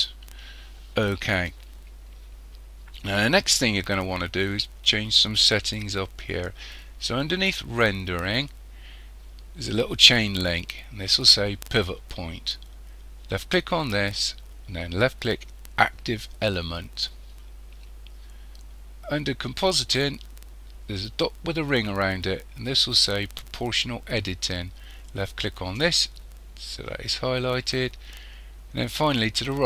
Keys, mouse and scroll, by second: 13.3 click, 25.3 click.